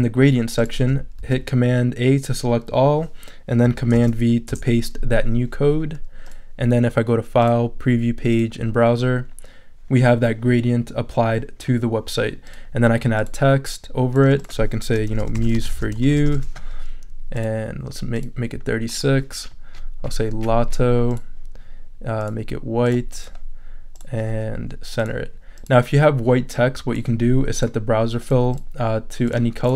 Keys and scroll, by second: 1.2 super+a, 3.9 super+v, 4.5 super+Return, 5.1 Return, 14.9-16.6 typing, 17.2 super+a.